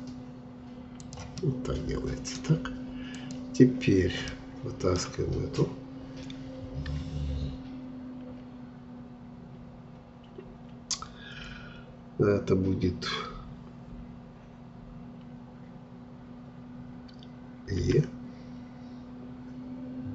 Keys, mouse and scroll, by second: 1.4-3.1 middle drag, 3.1-4.3 drag, 4.3-7.3 middle drag, 17.8 e.